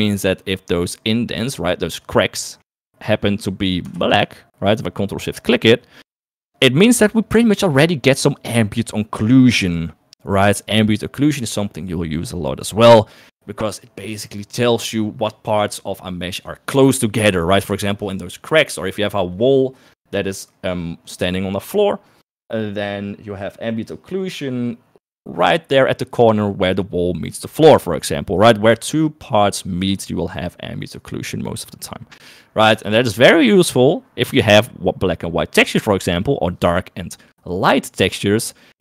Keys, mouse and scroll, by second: 1.4 click, 2.8 click.